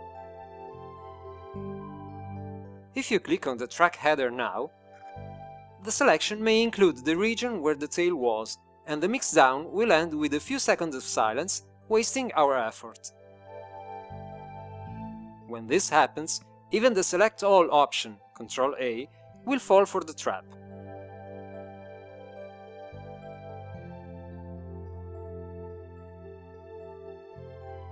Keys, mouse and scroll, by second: 0.0-1.0 drag, 13.0 click, 27.6 ctrl+a.